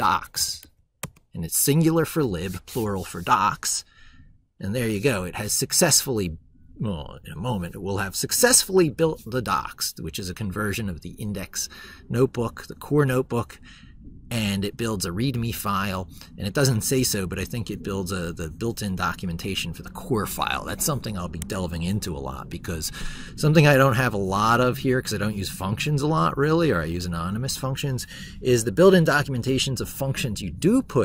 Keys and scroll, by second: 22.3 ctrl+super+Left.